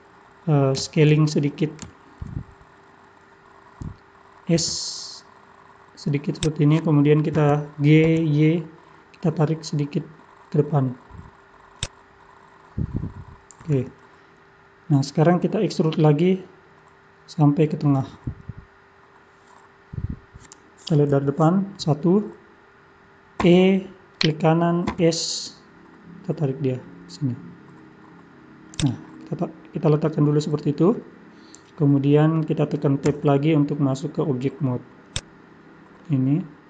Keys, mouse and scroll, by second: 0.0-0.3 scroll up 4, 1.8 scroll up 2, 1.9 shift+middle click, 2.6 scroll up 1, 4.7 s, 7.4 g, 12.1-13.6 scroll down 6, 13.7 scroll down 1, 19.8 scroll down 1, 20.3-21.1 scroll down 1, 21.1 KP_1, 23.4 e, 24.8 s, 29.1-29.8 scroll down 3, 29.8 middle click, 33.1 Tab, 35.1 click, 36.0 middle click.